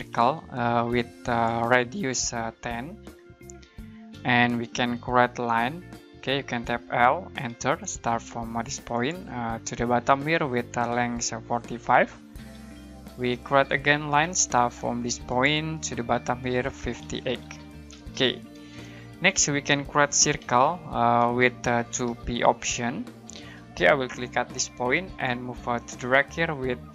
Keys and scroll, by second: 0.0-0.6 typing, 2.8-4.1 typing, 5.5-7.6 typing, 10.6-12.6 typing, 13.8-14.5 typing, 17.0-23.3 typing.